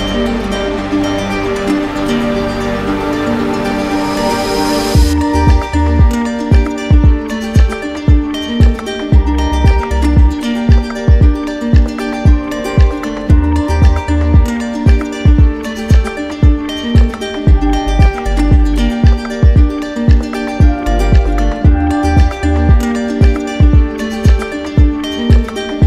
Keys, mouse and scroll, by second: 0.4 alt+click, 7.1 alt+right click, 9.1 right click, 9.5 shift+right click, 12.1-13.2 right drag, 14.6-15.7 drag, 17.5-19.6 drag, 20.6 click, 23.1 click, 23.9 click, 25.3 click.